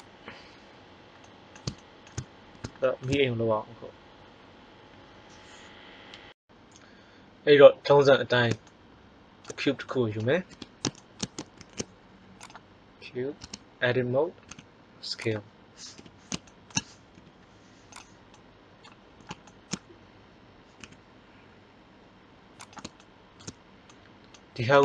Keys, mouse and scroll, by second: 10.5 KP_1, 11.5 shift+a, 13.3 Tab, 14.4 s, 15.9 KP_3, 17.1 g, 20.7 s, 24.6-24.8 middle drag.